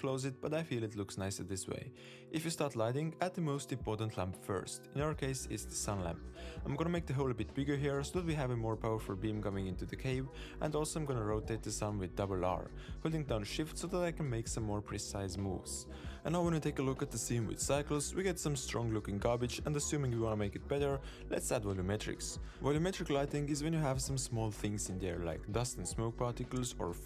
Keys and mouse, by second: 0.1 middle drag, 0.6 g, 1.1 g, 2.8 shift+click, 3.8 shift+a, 7.0 shift+middle click, 7.1 middle click, 7.4 shift+middle click, 7.6 middle drag, 7.8 click, 7.9 x, 9.1 click, 10.0 x, 10.9 shift+drag, 12.0 r, 15.1 r, 16.0 super+s, 16.4 click, 17.0-18.0 drag, 18.6 z, 21.3 z.